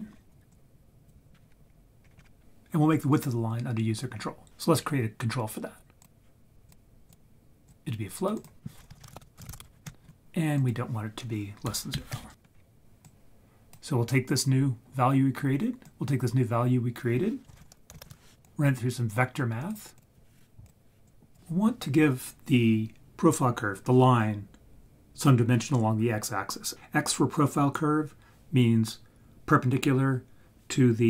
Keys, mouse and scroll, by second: 0.5-1.1 drag, 2.0 scroll up 8, 4.5 click, 6.0-6.6 drag, 7.1-7.7 drag, 8.3-9.8 drag, 10.5-12.3 drag, 12.5-12.8 scroll down 1, 13.0 click, 15.8 drag, 17.6 shift+a, 19.9-20.6 drag, 21.1 click.